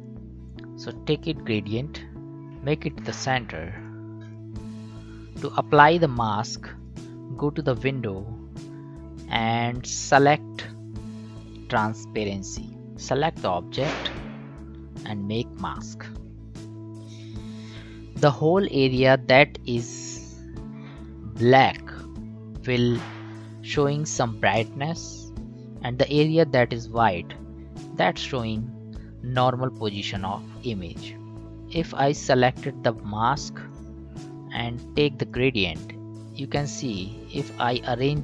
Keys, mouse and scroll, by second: 12.2-15.2 drag, 15.8 click, 33.6-38.2 drag.